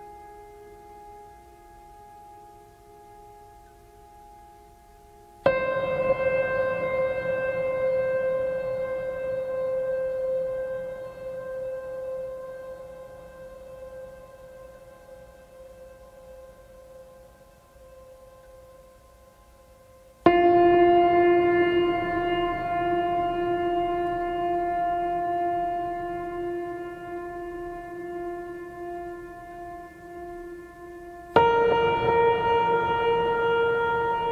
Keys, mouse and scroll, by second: 3.4-4.3 scroll down 1, 4.3-5.7 drag, 10.7 click, 11.4 right click, 11.7-16.9 drag, 26.0 ctrl+d, 26.4 ctrl+space, 26.7 ctrl+click, 26.9-27.3 ctrl+space, 28.1 scroll up 1, 28.5 o, 30.8-31.8 drag, 33.4 scroll down 1.